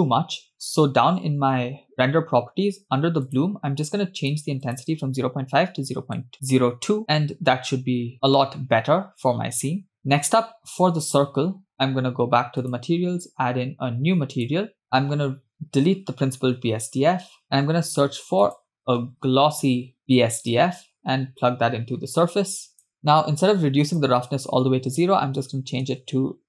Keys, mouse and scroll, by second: 1.9 click, 3.3 click, 4.2-6.3 drag, 10.7 click, 14.6 click, 15.1 click, 15.9 click, 17.1 x, 18.1 shift+a, 19.7 s, 22.1 click, 24.4-26.4 drag.